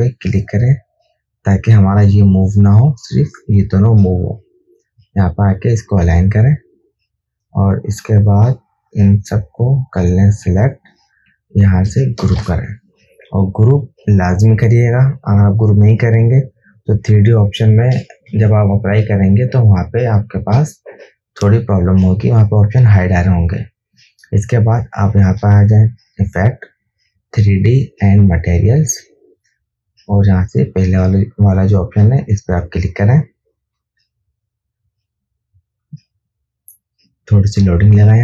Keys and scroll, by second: 12.6 ctrl+g, 18.5 ctrl+-, 18.7 ctrl+space.